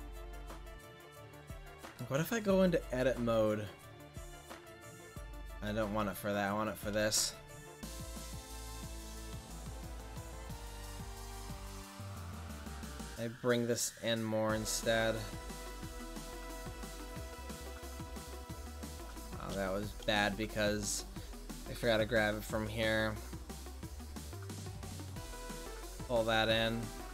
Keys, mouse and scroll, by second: 1.1-1.7 drag, 6.1 click, 6.8 right click, 8.6 click, 9.4-10.5 right drag, 11.3-13.6 drag, 17.3 ctrl+z, 17.6 ctrl+z, 17.8 ctrl+z, 18.0 ctrl+z, 18.5 ctrl+z, 23.9 s.